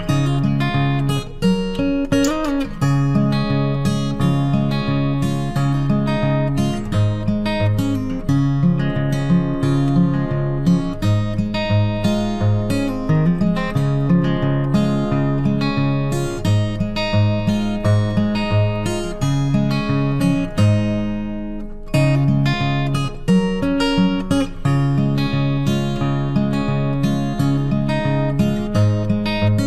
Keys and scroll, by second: 22.2 ctrl+t.